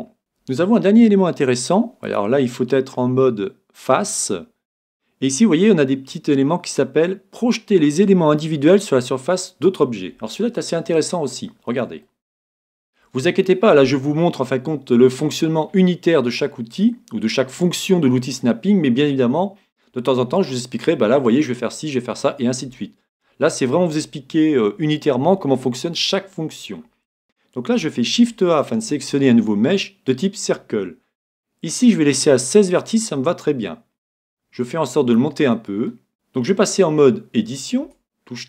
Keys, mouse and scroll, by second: 2.1-3.9 drag, 11.1-14.6 middle drag, 34.3-36.2 drag, 35.6 middle click, 37.9 Tab.